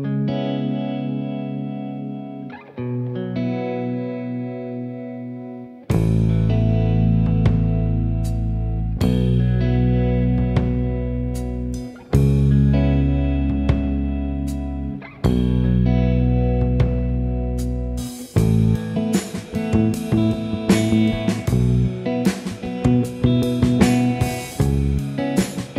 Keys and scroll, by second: 2.7 F7, 3.9 F1, 5.7 g, 7.7 F1, 8.6 ctrl+d, 12.1-12.9 typing, 20.6-21.1 typing, 21.8 ctrl+d.